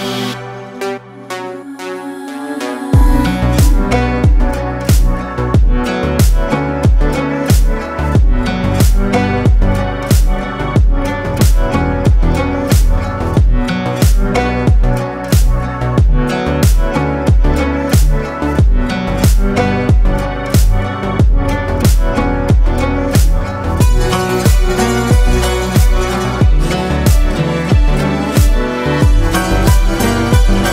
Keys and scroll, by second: 4.0 ctrl+alt+z, 4.4 ctrl+alt+space, 5.0 ctrl+alt+space, 6.0 ctrl+alt+shift+space, 13.8 ctrl+z, 25.2 ctrl+space, 26.2 ctrl+space.